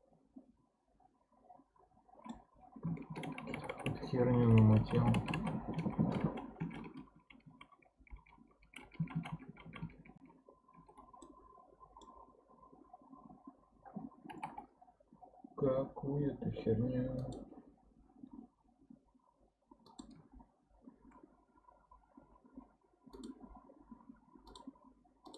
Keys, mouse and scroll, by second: 3.1-4.6 ctrl+z, 5.3-7.5 ctrl+z, 7.8 ctrl+z, 8.0 ctrl+z, 8.2-9.2 ctrl+z, 9.5-9.9 ctrl+z, 11.2-14.3 middle drag, 14.3 k, 22.2 k.